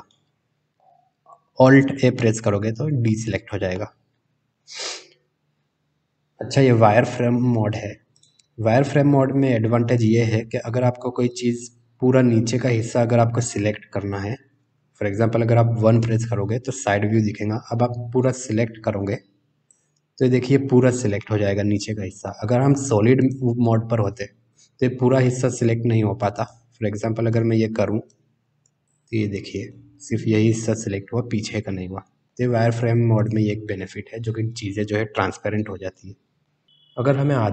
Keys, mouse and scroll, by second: 0.1 middle click, 2.1 alt+a, 3.7-4.4 middle drag, 8.1 click, 15.9 KP_1, 18.6 b, 20.4-22.2 middle drag, 23.2 click, 24.4 KP_1, 26.4 alt+a, 27.2 b, 29.6-32.2 middle drag, 33.1 click, 36.4 middle click, 37.4 middle click.